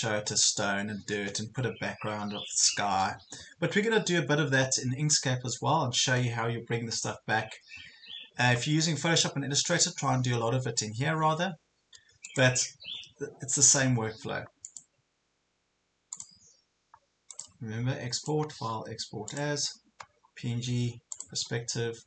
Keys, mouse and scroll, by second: 12.3-22.0 drag.